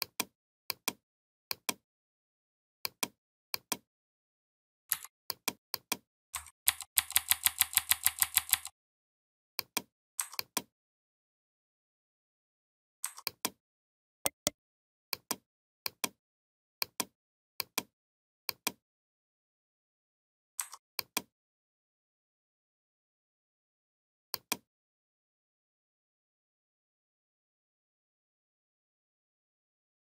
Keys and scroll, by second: 4.7 v, 6.4 ctrl+[.